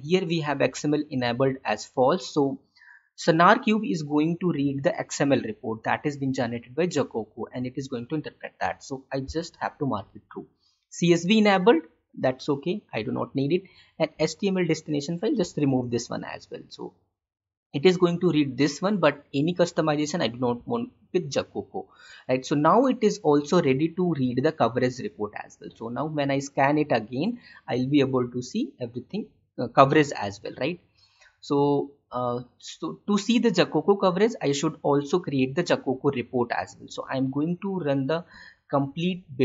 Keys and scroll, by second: 15.3 ctrl+/.